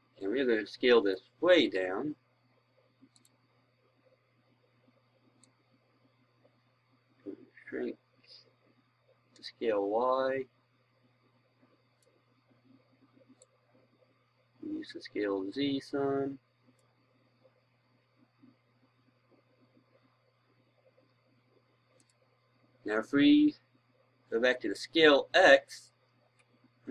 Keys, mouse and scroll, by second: 24.9 Right.